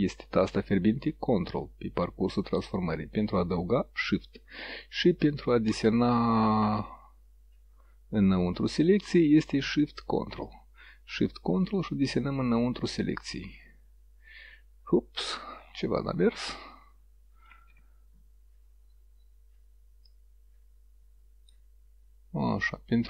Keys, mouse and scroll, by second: 9.9 click, 11.2-12.5 drag, 17.5 ctrl+z, 20.1-21.7 drag.